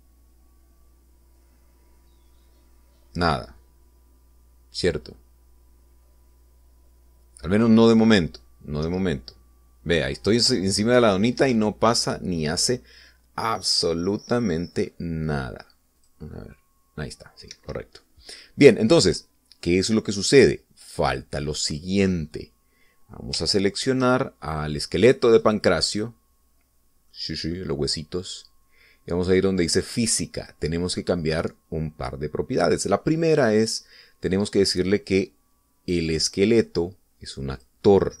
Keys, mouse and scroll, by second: 9.9 Right, 12.4 Escape, 15.5-16.1 scroll up 2, 17.0 click, 18.6 Escape, 20.9-21.8 scroll down 2, 23.1-23.4 scroll up 2, 24.5 shift+middle click, 26.1 click, 26.5 right click, 26.9 right click, 28.1 middle click, 31.5 click.